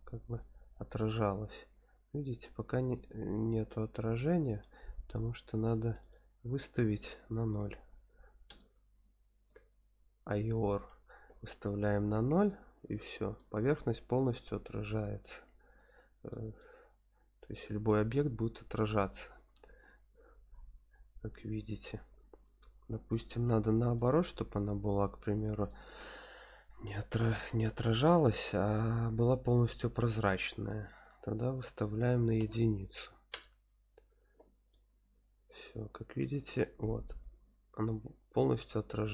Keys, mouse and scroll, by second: 2.7 scroll up 1, 4.1 click, 6.0-8.5 drag, 12.4-13.4 middle drag, 13.7 scroll up 1, 14.3-14.8 middle drag, 14.3 scroll up 1, 15.0 middle click, 15.1 middle click, 15.5-16.3 middle drag, 16.6-21.8 middle drag, 23.9-25.7 middle drag, 30.4 click, 34.7-39.1 middle drag.